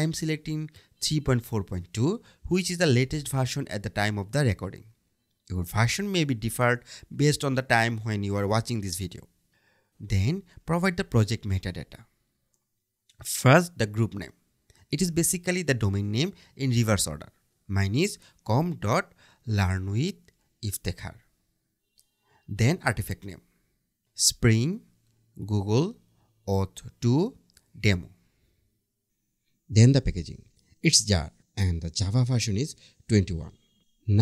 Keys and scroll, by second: 20.8 Tab.